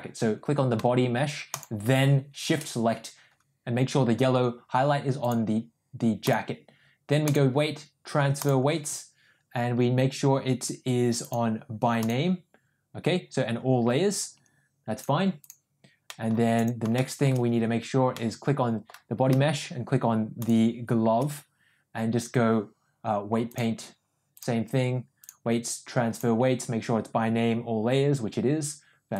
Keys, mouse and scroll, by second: 1.5 shift+click, 5.2-6.5 drag, 7.3-8.8 drag, 11.2-12.6 drag, 15.0-15.6 drag, 16.1 middle click, 17.0 shift+middle drag, 18.2 middle click, 20.4 shift+click, 23.6-24.5 drag, 25.2-26.4 drag.